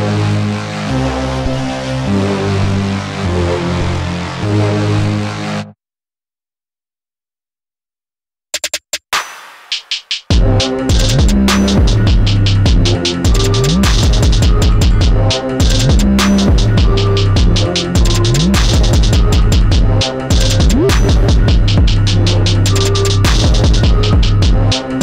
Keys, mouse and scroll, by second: 2.7-3.9 scroll down 2, 3.9 click, 5.4 click, 10.6 click, 11.8-16.3 drag, 19.8 click, 21.0 click, 23.9-25.0 drag.